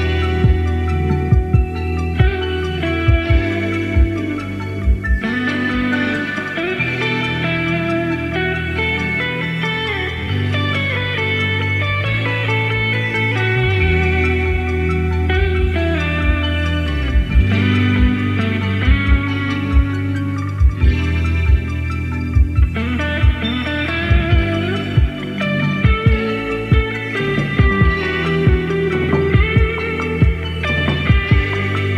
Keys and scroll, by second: 0.8 Left, 1.0 Left, 1.9 Left, 6.6 super+c, 6.8 super+v, 13.4 BackSpace, 13.8 super+c, 14.1 super+v, 22.2 super+c, 22.3 super+v.